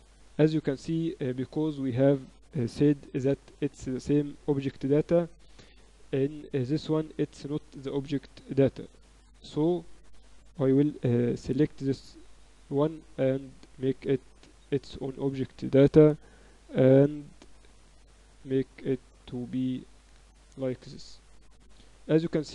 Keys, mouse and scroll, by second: 6.6-8.3 right drag, 8.3 middle click, 9.0 Tab, 9.6 a, 10.0 a, 10.4 a, 11.3 Tab, 13.6-15.9 drag, 15.1 Tab, 15.3 a, 15.9 middle click, 16.0 a, 16.4 a, 17.0 b, 18.0 click, 19.4 Tab, 20.0 z.